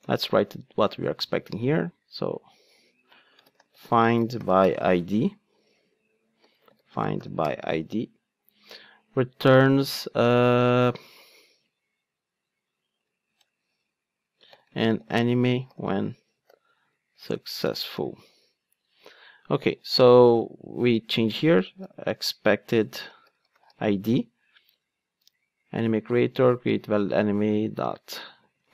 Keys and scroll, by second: 0.0 super+v.